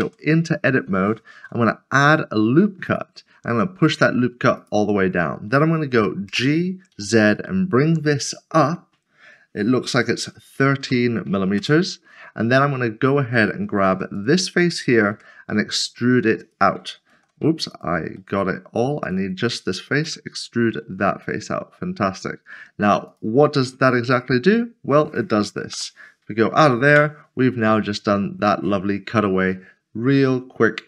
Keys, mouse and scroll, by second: 0.0 Tab, 1.3 ctrl+r, 6.9 typing, 10.5 typing, 11.6 Return, 14.2 click, 15.1 e, 16.4 click, 17.1 ctrl+z, 17.7 ctrl+z, 18.2 middle click, 22.0 e, 23.5 middle click, 25.7 /, 26.9 Tab, 27.4 /, 28.5 middle click.